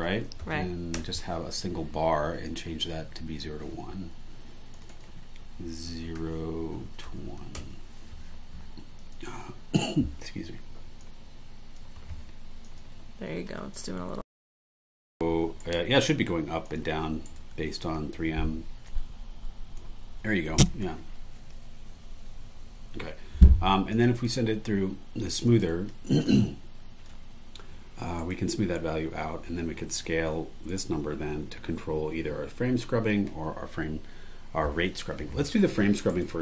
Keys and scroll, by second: 0.0-1.0 typing, 6.2-7.7 typing, 15.6 super+e, 17.3 super+e, 24.2 super+e, 25.6 super+e, 28.2 super+e, 36.1 super+e.